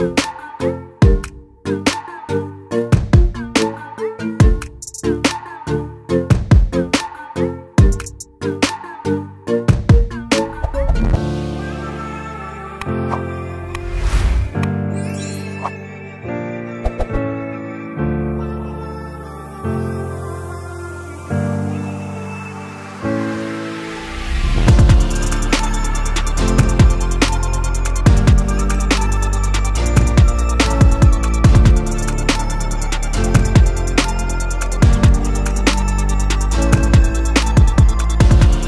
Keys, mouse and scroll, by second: 0.3-14.4 drag, 14.4 right click, 16.1 click, 18.5-22.4 drag.